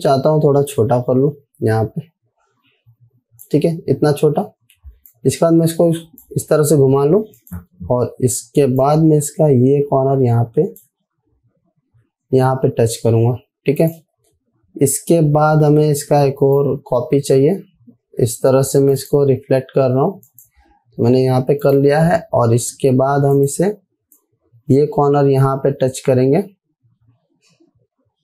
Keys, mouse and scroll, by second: 1.2-4.0 drag, 5.9-6.8 shift+click, 9.6-11.4 drag, 11.6-12.2 alt+scroll up 1, 13.5-13.9 alt+scroll down 1, 14.3-16.6 drag, 16.9 right click, 19.4 click, 22.6 alt+scroll up 1, 23.8 click, 24.9-28.2 shift+drag.